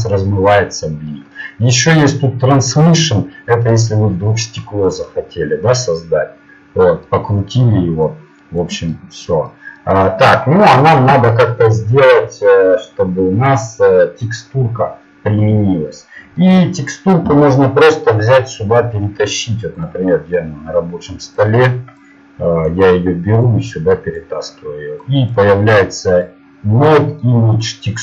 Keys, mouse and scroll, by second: 2.6-4.2 drag, 4.6 click, 5.4 click, 8.1 click, 10.4 click.